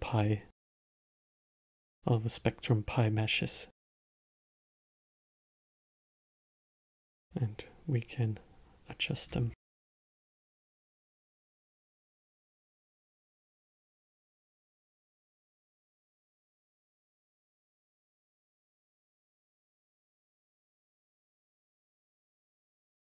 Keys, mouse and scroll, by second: 1.1-4.1 middle drag, 4.1-6.5 drag, 6.5-8.5 middle drag, 8.5 click, 9.6-10.1 scroll up 2, 10.1-11.6 alt+middle drag, 11.6 scroll down 1, 11.9 scroll up 1, 13.1-16.2 middle drag, 16.8 click, 20.5-23.0 middle drag.